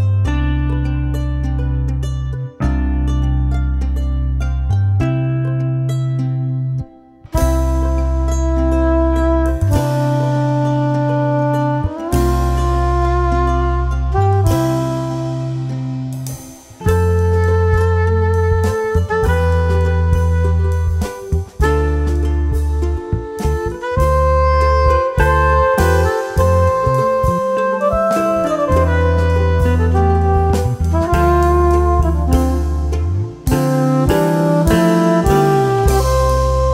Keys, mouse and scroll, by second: 3.8 t, 6.6 click, 7.8-8.8 scroll up 2, 8.8 scroll up 1, 9.2 click, 9.7-10.1 scroll down 2, 10.4-11.5 scroll down 2, 11.5 scroll down 1, 13.2 q, 14.2-15.8 right drag, 17.5-18.9 drag, 19.5 click, 21.4 click, 24.2 click, 26.0 click, 27.4 click, 29.3 click, 30.3-31.4 shift+right drag, 31.8 click, 32.7 shift+right click.